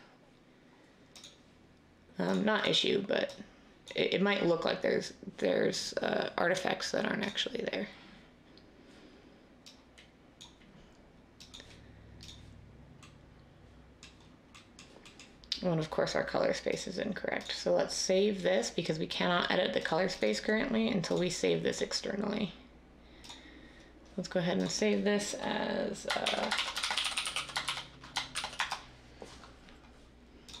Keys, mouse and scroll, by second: 26.2-28.3 typing, 28.5 Return.